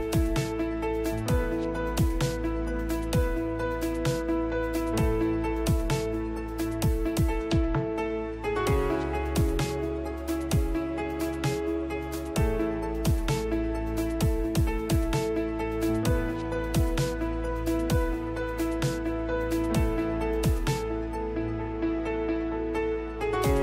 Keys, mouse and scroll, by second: 3.2 c, 5.2 Escape, 5.9 g, 11.2 n, 16.4-21.5 middle drag, 22.5 middle click.